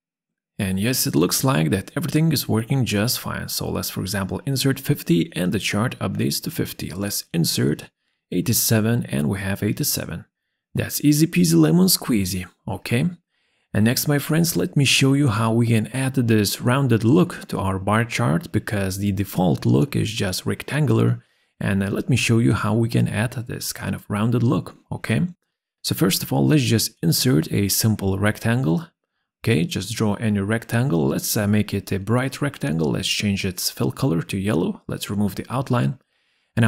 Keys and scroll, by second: 2.9 5, 3.4 Return, 6.8 8, 6.9 7, 7.4 Return, 10.6 7, 10.9 Return.